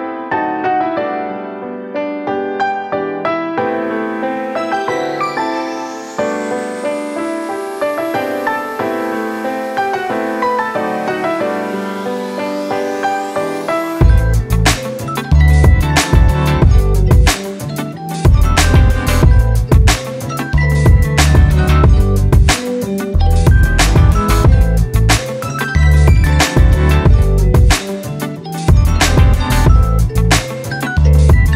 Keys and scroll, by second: 7.2-10.9 typing, 8.3 Tab, 14.7-15.9 typing, 16.1 Return, 19.9 p, 20.7 Return, 22.3-23.1 typing, 27.2 x.